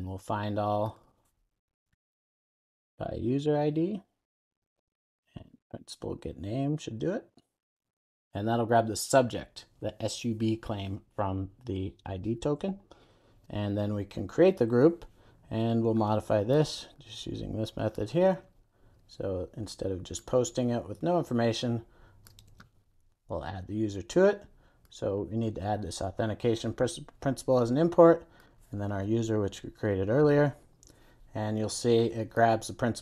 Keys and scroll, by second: 4.0 Return, 22.6 super+v, 25.9 alt+Return.